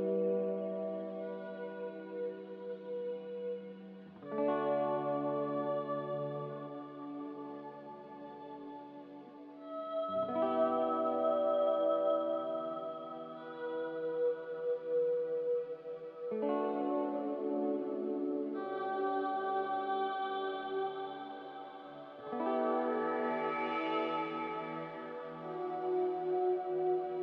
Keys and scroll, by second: 4.0-4.8 typing, 4.8 Return, 8.2-9.0 typing, 9.1 Return, 14.7-15.5 typing, 19.7-20.5 typing, 20.5 Return, 27.1-27.2 typing.